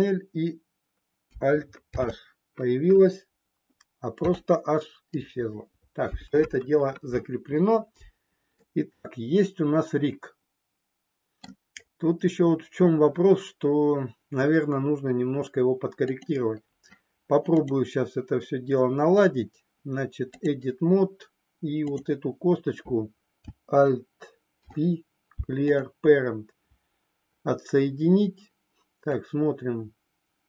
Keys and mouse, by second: 1.8 alt+h, 4.2 h, 8.5-11.4 middle drag, 16.0 click, 17.7-20.4 drag, 29.0-30.4 drag.